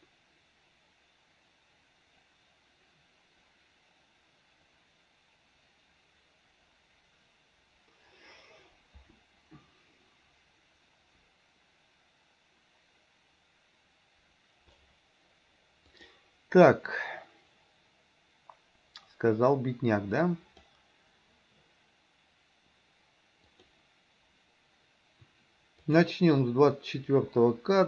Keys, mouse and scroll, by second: 16.0 click, 20.2 click, 23.5 click, 26.0 click.